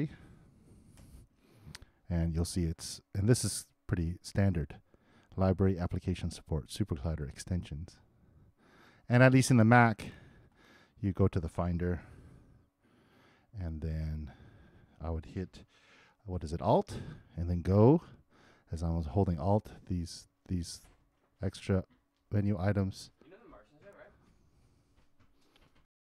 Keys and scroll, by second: 0.9 super+Return, 12.0 super+Tab, 25.8 alt+i.